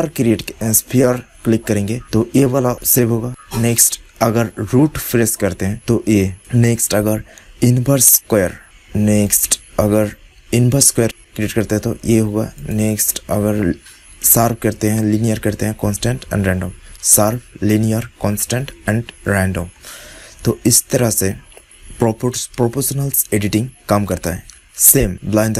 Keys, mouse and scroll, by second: 2.7-5.7 drag, 6.3-8.3 drag, 9.2-11.2 drag, 12.5-15.2 drag, 19.6-23.1 middle drag.